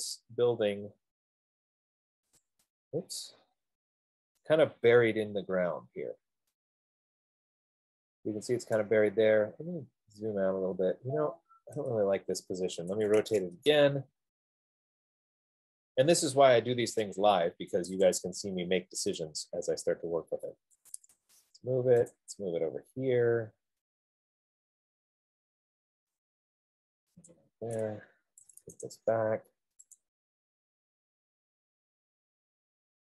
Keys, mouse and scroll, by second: 2.8 click, 3.9 scroll, 9.1 right click, 9.2 middle click, 9.4-10.9 scroll, 11.5-12.0 scroll, 12.3 middle click, 13.3-13.7 typing, 17.3 click, 18.5 click, 18.5 typing, 19.5 click, 20.1-20.7 scroll, 21.0-21.4 typing, 22.6 click, 23.9 F15, 27.6 click, 28.6-29.0 typing, 30.3 click.